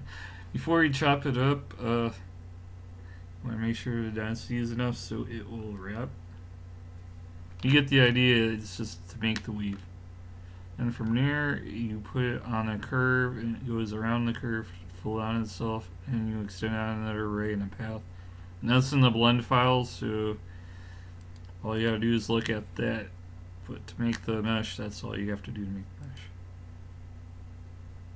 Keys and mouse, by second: 5.2 a, 5.8-7.8 middle drag, 21.2-23.0 drag, 23.0-24.8 middle drag, 25.0 middle click.